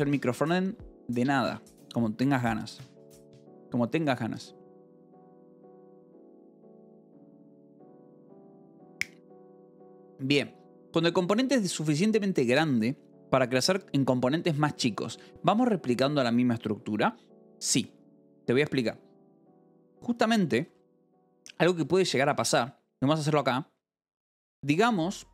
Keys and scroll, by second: 21.2-22.3 typing, 24.0-25.3 typing.